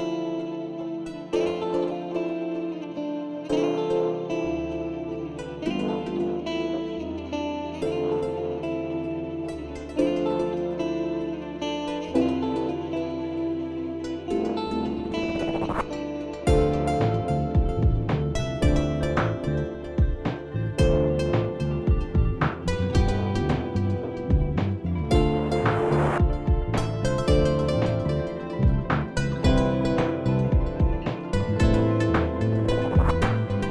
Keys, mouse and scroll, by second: 1.5 click, 2.5 alt+scroll, 3.6 ctrl+t, 4.5 alt+scroll, 6.4 click, 7.8 click, 7.8 alt+scroll down 1, 8.7 click, 10.1 click, 10.4-10.8 alt+scroll up 1, 11.2 alt+scroll, 11.4-12.0 alt+scroll up 1, 13.3 click, 13.5-14.0 alt+scroll, 14.0 click, 14.0 alt+scroll up 1, 14.3-14.7 alt+scroll down 1, 15.1 click, 15.5 alt+scroll, 15.9 click, 17.6 click, 20.0 click, 20.7 click, 22.8 click, 22.9 ctrl+t, 23.5 click, 23.9 Up, 24.0 Up, 24.8 Up, 24.8 Right, 27.1 Down, 28.9 click, 29.0 Return, 30.9 click, 31.0 click, 32.5 r, 33.5 h.